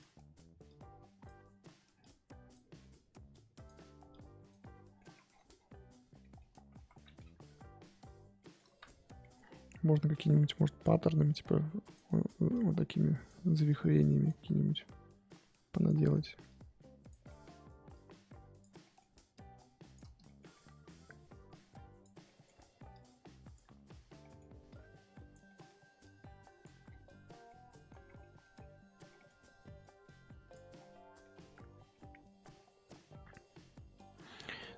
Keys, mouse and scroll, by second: 0.6-4.9 drag, 4.9 scroll down 1, 4.9 middle click, 5.1 scroll up 1, 5.2-6.2 scroll down 10, 6.2 middle click, 6.6 ctrl+z, 6.7 ctrl+z, 7.2-8.3 scroll up 12, 8.4 middle click, 8.7 ctrl+z, 9.2 middle click, 9.5-10.0 scroll up 2, 10.0-10.4 scroll down 2, 10.4-11.3 scroll up 1, 11.3-14.5 drag, 14.5 middle click, 15.2 click, 16.0 middle click, 16.4 click, 17.2 middle click, 17.9 click, 18.8 middle click, 19.3 click, 20.2-21.5 shift+middle drag, 21.5 click, 22.2 shift+middle click, 22.9-24.2 drag, 24.2 middle click, 24.7 click, 25.4 middle click, 26.0 click, 26.8-27.4 scroll down 7, 27.5 middle click, 28.0 scroll down 1, 28.2 middle click, 28.5-29.8 scroll up 11, 29.1 middle click, 29.8 click, 30.7-31.2 scroll down 5, 31.2 middle click, 31.5 scroll up 1, 31.7 scroll down 1, 31.9-33.1 middle drag, 33.1-34.7 scroll up 3.